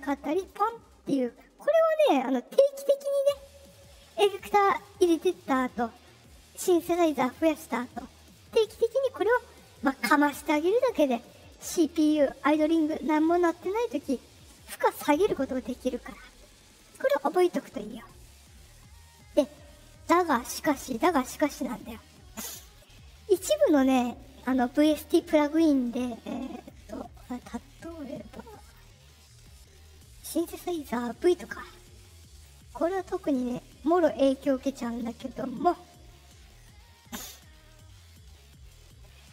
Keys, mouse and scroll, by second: 0.3 click, 23.4 click, 26.5 click, 27.1 click, 28.5 click, 30.4 click, 36.6 click, 37.7 click.